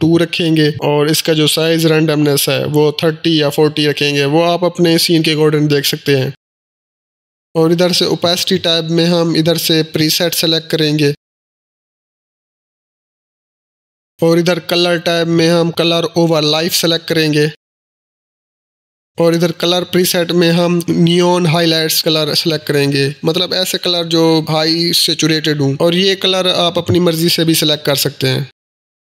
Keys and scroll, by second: 2.6-6.0 typing.